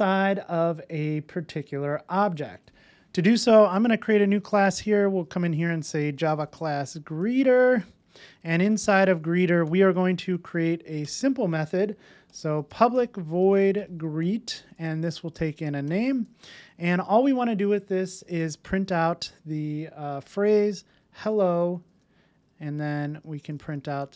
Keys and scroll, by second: 18.6 Tab.